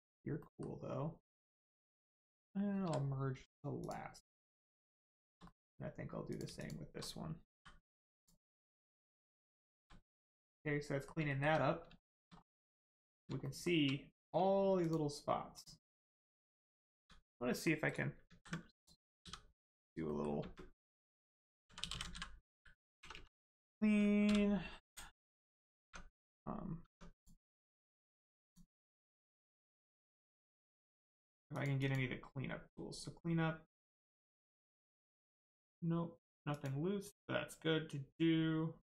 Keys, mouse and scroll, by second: 0.0-0.4 scroll down 1, 0.4 middle click, 1.7 shift+click, 2.8 m, 3.8 click, 4.4 shift+middle click, 5.4 middle click, 5.5 middle click, 6.2 click, 6.6 shift+click, 8.2 click, 8.5 scroll down 1, 9.5 shift+middle click, 10.0-10.4 scroll down 1, 10.4 middle click, 11.2 shift+middle click, 11.5 scroll up 1, 12.0 shift+middle click, 12.2 scroll up 1, 13.4 shift+middle click, 14.1 click, 14.8 shift+click, 15.5 shift+click, 16.4 scroll down 1, 16.6 middle click, 17.0 s, 17.5 middle click, 17.8 right click, 18.2 ctrl+z, 18.8 click, 19.2 s, 20.0 middle click, 20.4 space, 21.6 c, 21.8 l, 22.1 n, 23.0 BackSpace, 24.2 n, 25.8 Tab, 27.1 click, 27.5 Tab, 28.4 click, 31.5 click, 34.4 click.